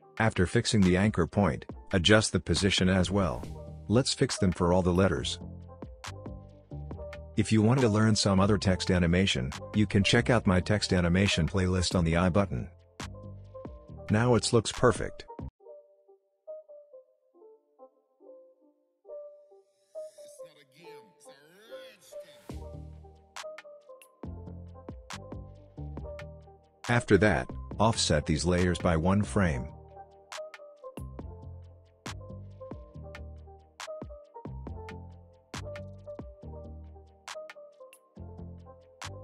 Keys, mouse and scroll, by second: 1.1-2.0 drag, 4.0-9.8 typing, 4.6 click, 5.1-5.6 click, 5.9 click, 6.8 click, 7.5 click, 7.6 Left, 8.1 click, 8.4-8.7 click, 9.1 click, 9.2 ctrl+z, 9.2 click, 9.9-10.4 click, 10.8 Right, 10.9 Left, 11.2 click, 11.4 Right, 11.6 click, 11.8 scroll down 1, 11.8 click, 12.0 space, 12.4 click, 12.5 p, 12.7 click, 13.6 space, 15.6 space, 16.6 click, 17.3 u, 18.1 click, 18.3 u, 18.7 u, 19.2 u, 19.9 u, 20.5-23.1 drag, 25.2-25.7 alt+scroll up 2, 26.4 click, 27.8 shift+click, 28.9-29.2 alt+scroll up 2, 29.9-30.3 drag, 32.5 shift+click, 34.3-39.1 drag.